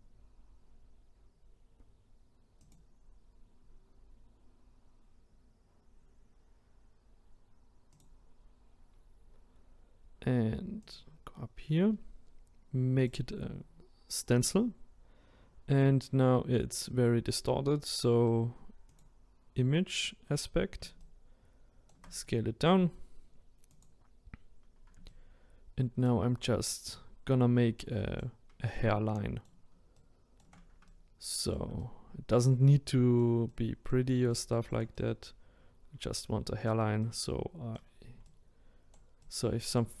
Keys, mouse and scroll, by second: 10.9 click, 19.0-21.0 drag, 21.0-23.8 shift+right drag, 23.8 click, 25.1-40.0 ctrl+right drag.